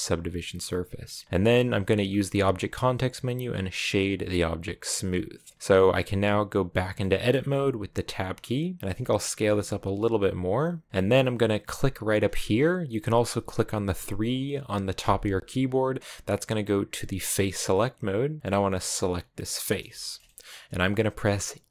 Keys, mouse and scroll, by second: 0.9-4.9 middle drag, 4.9 w, 5.5-7.1 middle drag, 7.1 Tab, 8.6 middle click, 8.8 s, 10.5 g, 15.0 3, 18.9 right click, 19.8-21.7 shift+middle drag.